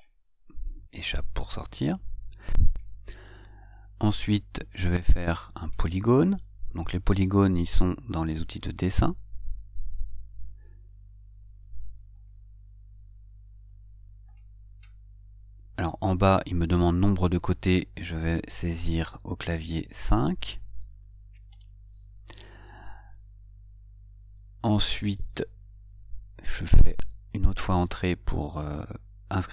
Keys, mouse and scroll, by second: 1.5 Escape, 11.9 click.